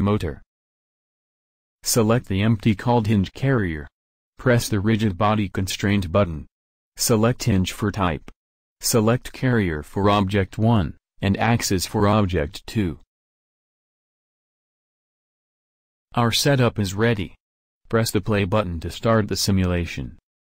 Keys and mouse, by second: 0.8-2.0 drag, 2.0 middle click, 2.6 click, 2.8-5.3 middle drag, 5.3 click, 6.6-8.4 drag, 9.8-11.6 drag, 12.6-14.4 drag, 17.6-20.5 drag.